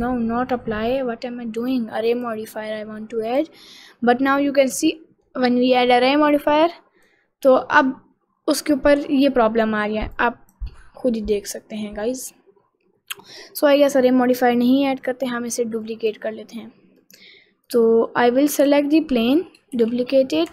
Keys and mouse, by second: 0.1 ctrl+z, 2.3-3.5 drag, 3.9 middle click, 4.4 middle click, 4.9 middle click, 6.8 click, 10.3 click, 13.4 click, 13.8 middle click, 14.3 middle click, 14.9 click, 16.0 click, 17.1 click, 17.7 click, 18.1 middle click, 18.5 click, 19.9 shift+d.